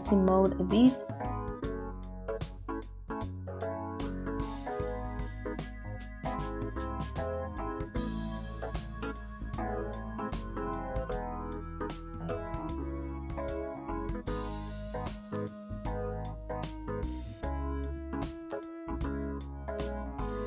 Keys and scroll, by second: 7.5 space, 18.4 ctrl+z.